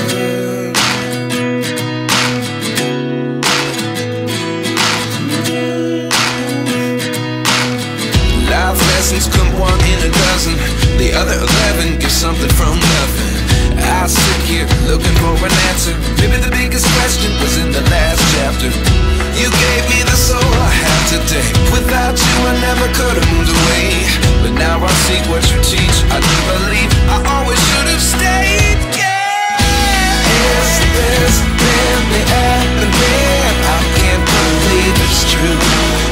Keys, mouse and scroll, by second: 1.0 double click, 10.7 double click.